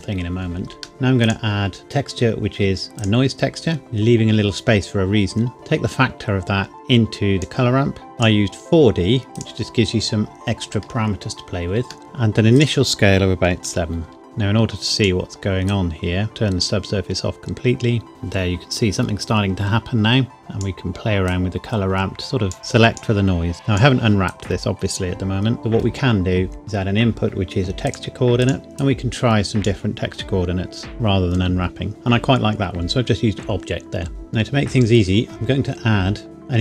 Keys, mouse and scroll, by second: 1.2 click, 3.0 click, 3.8 shift+middle click, 5.5 click, 8.1-9.5 scroll up 1, 9.5 click, 12.0 middle click, 12.6 click, 13.6 KP_7, 14.1 KP_Enter, 14.2 click, 20.4 click, 25.6 middle click, 26.6 click, 29.1 click.